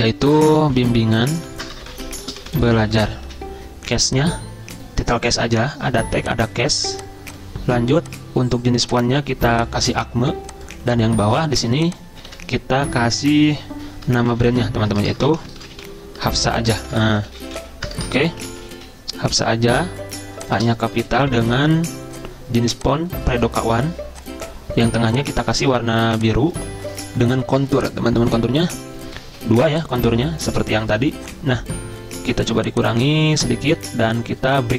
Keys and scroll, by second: 0.1-3.3 typing, 3.3 ctrl+a, 12.3 ctrl+a, 14.1-19.9 typing, 15.3 Caps_Lock, 21.0 shift+Delete, 21.1-21.9 typing.